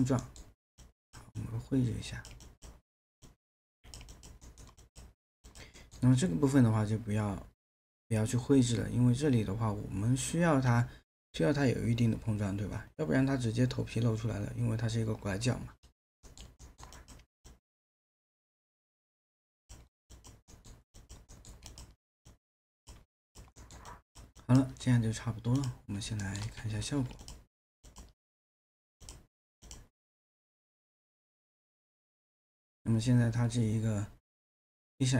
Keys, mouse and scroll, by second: 0.2 alt+middle click, 4.4 alt+middle click, 5.8 alt+middle click, 16.3 alt+middle click, 20.5 alt+middle click, 23.6 alt+middle click, 26.2 alt+middle click, 26.6 q, 26.7 q.